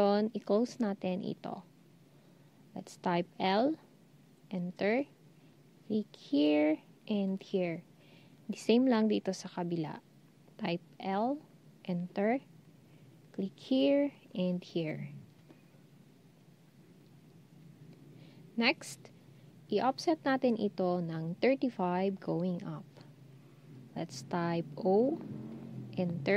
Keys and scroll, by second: 3.4 l, 10.8 l, 24.9 0.